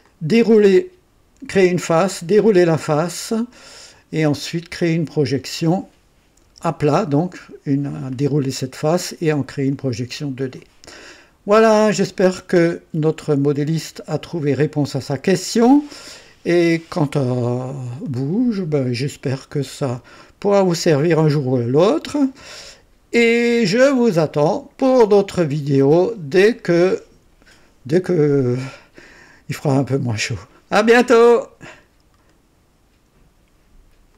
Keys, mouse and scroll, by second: 0.0-0.8 drag, 2.6-4.1 drag, 4.4-5.9 drag, 6.4 KP_1, 6.5 KP_1, 9.7-10.7 drag, 11.5 scroll up 1, 12.0 right click, 13.2-21.5 drag, 22.3-25.7 drag, 32.3 right click, 34.1 click.